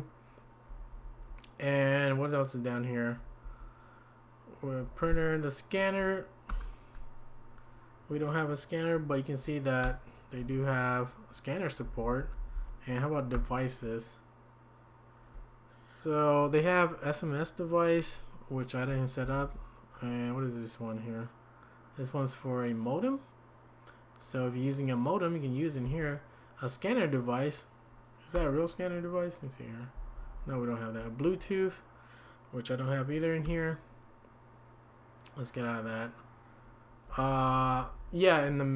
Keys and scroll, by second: 0.7 Down, 3.2 typing, 4.9 typing, 6.5 typing, 9.8 Escape, 11.8-13.3 typing, 19.2 Down, 25.9 Down, 30.1 Down, 30.3 Down, 31.2 Down, 33.5 Escape, 37.1 Down, 37.6 Down, 37.8 Down, 38.0 Down.